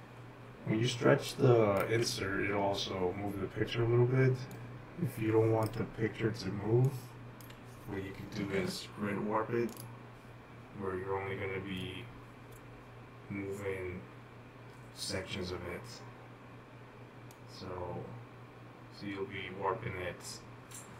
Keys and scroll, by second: 1.0-1.7 typing, 2.8-4.8 typing.